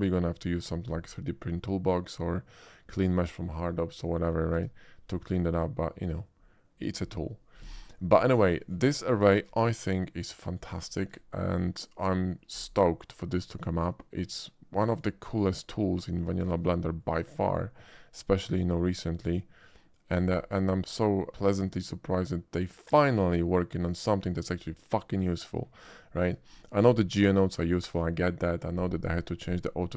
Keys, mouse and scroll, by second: 0.4 shift+middle click, 4.6 Tab, 5.1-6.3 middle drag, 8.6 shift+click, 8.7 x, 9.0 click, 9.4 shift+a, 10.5 click, 11.2 shift+middle drag, 11.6-11.9 shift+middle drag, 12.2 shift+middle drag, 13.5 shift+click, 14.9 shift+click, 16.0 middle click, 16.4 shift+middle drag, 16.8 shift+middle click, 17.9-18.6 shift+drag, 19.4-20.1 drag, 20.7-21.3 shift+middle drag, 21.4-24.4 shift+middle drag, 26.0 shift+middle drag, 26.6 shift+middle click.